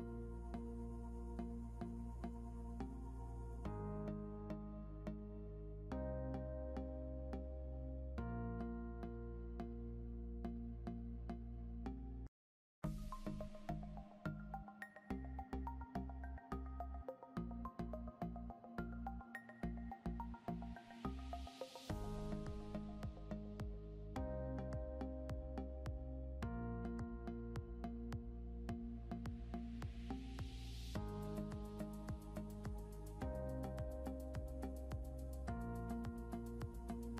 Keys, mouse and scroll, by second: 0.5 click, 9.2 scroll down 1, 12.2 scroll up 1, 13.1 click, 13.6 scroll up 1, 14.8 click, 19.1 scroll down 1, 21.7 click, 23.0 scroll up 1, 24.1 click, 26.0 scroll down 1, 27.4 click, 30.9 scroll up 1, 32.0 Right, 34.3 scroll down 1, 36.7 click.